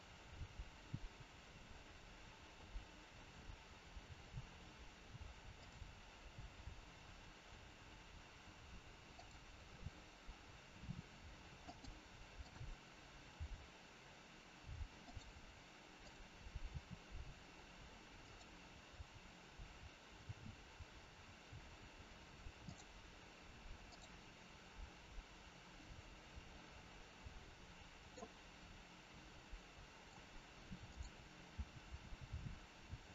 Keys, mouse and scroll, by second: 0.3 g, 9.1 click, 10.8 r, 12.3 click, 13.3 r, 15.8 click, 16.7 r, 21.2-22.6 scroll up 1, 22.6 click, 23.8 click, 25.7 middle click, 29.4 middle click, 31.5 click, 31.6 r.